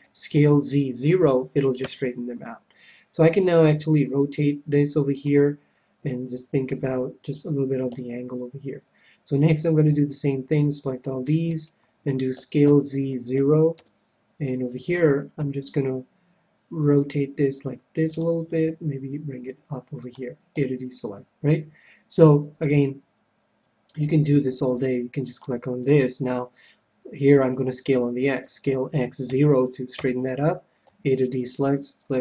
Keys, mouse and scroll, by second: 0.0 s, 3.6 r, 5.2-6.9 drag, 7.9 a, 9.8 c, 11.7-13.4 right drag, 12.3 s, 16.8 r, 18.1-19.9 drag, 18.4 g, 20.1-21.7 drag, 20.6 a, 23.9 c, 25.9-27.7 right drag, 28.4 s, 30.8 a, 31.4 c.